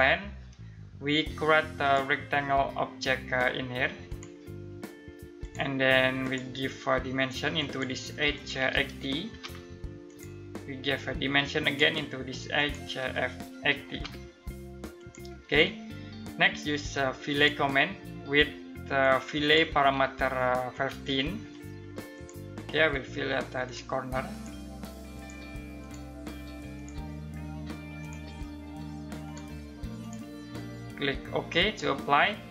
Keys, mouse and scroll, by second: 8.4-9.4 typing, 9.6 click, 13.0-14.0 typing, 14.5 click, 20.2-20.9 typing, 21.7 click.